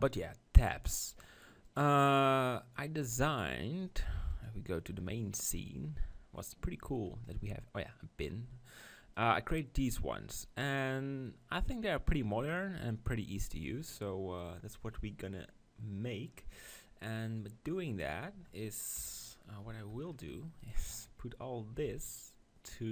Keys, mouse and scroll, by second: 1.7-3.5 drag, 4.3-6.1 drag, 5.5 KP_7, 6.4 middle click, 9.2-10.9 right drag, 9.9 click, 10.9 click, 11.1-14.8 middle drag, 18.1-19.8 drag, 19.0 KP_1, 19.8 middle click, 20.6-22.3 right drag, 21.8 b.